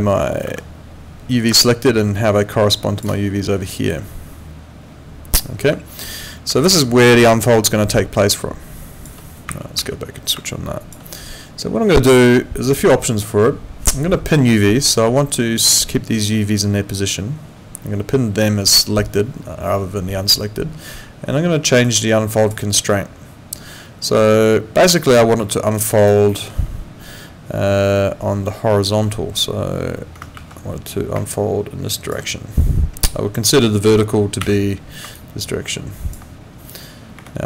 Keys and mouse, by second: 0.5 ctrl+2, 5.6 Escape, 6.6 alt+middle click, 7.0 alt+click, 10.5 click, 18.4 click, 21.8 click, 25.5 alt+middle click, 25.7 alt+right click, 26.3 alt+middle click, 29.0 F2, 30.4 ctrl+2, 37.2 Escape.